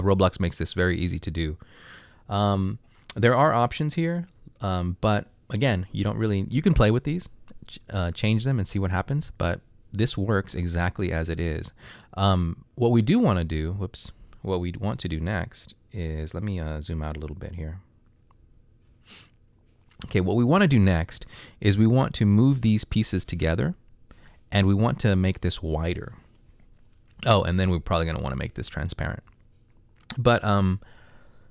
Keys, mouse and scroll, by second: 18.5 s, 18.9 s, 22.4 typing.